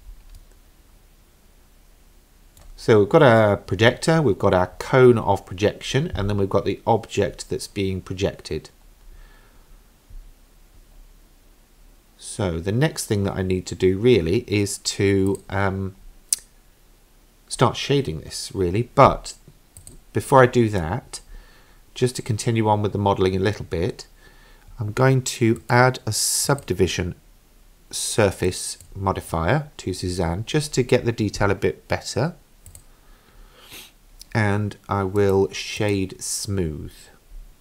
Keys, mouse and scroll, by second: 0.4-4.8 middle drag, 11.1-11.9 scroll down 2, 11.9-12.8 scroll up 1, 15.3 click, 16.4-17.0 scroll down 2, 17.6-18.2 scroll up 1, 19.8 click, 25.6 click, 26.5-30.5 drag, 32.7 click, 35.2 right click.